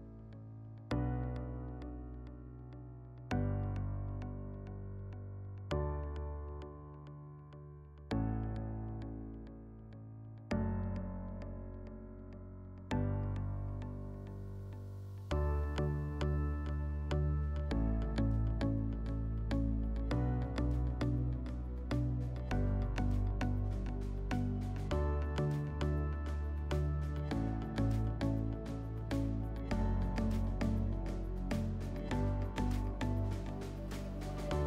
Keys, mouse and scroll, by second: 11.1 click, 13.1 click, 17.2-22.4 drag, 22.9 w, 24.8 click, 25.5 click, 26.5 middle click, 27.6 click, 27.8 click, 28.5-29.6 typing, 30.9 click, 34.4 click.